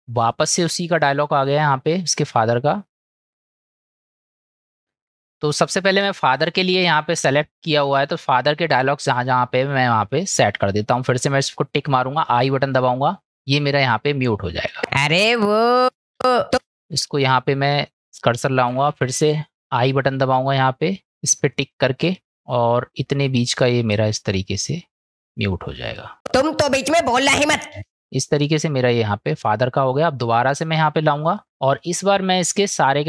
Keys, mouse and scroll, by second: 1.2 middle click, 3.0 middle click, 5.4-6.0 shift+middle drag, 6.8-7.2 shift+middle drag, 11.8 click, 13.5 middle click, 14.8 space, 15.9 space, 16.2 space, 16.6 space, 16.7 click, 19.7 click, 22.3-24.6 middle drag, 26.3 space, 27.8 space, 29.5 middle click, 31.3 click, 31.8-32.2 middle drag.